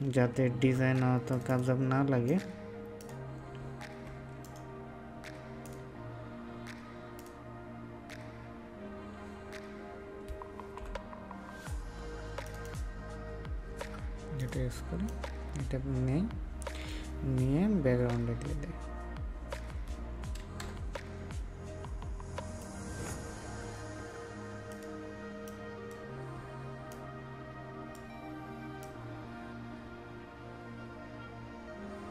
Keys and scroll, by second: 0.3 ctrl+x.